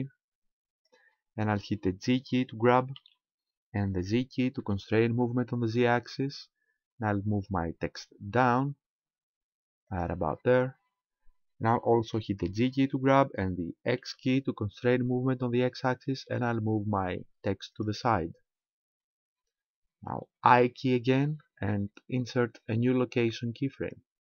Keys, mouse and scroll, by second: 3.0 g, 10.0 ctrl+click, 12.7 g, 17.9 ctrl+click.